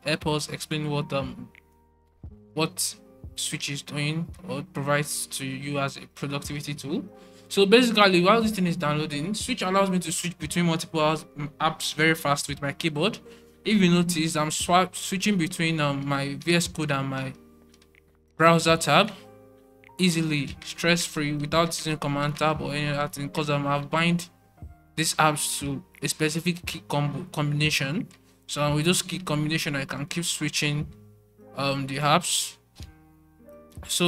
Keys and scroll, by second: 32.0 alt+super+3.